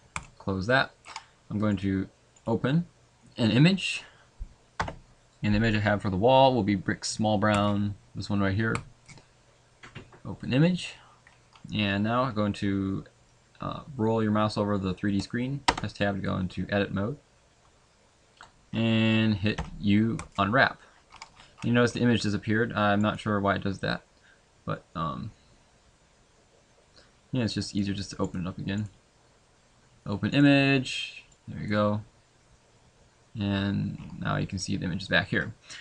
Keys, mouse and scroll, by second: 0.3-2.7 scroll down 4, 9.8 click, 15.6 Tab, 20.2 u, 32.5 click.